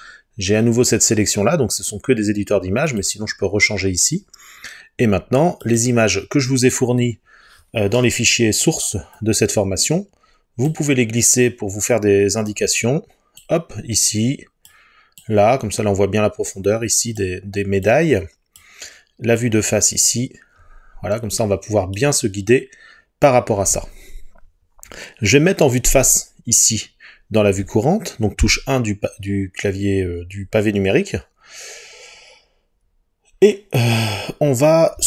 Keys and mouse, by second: 2.9 click, 28.5 KP_1.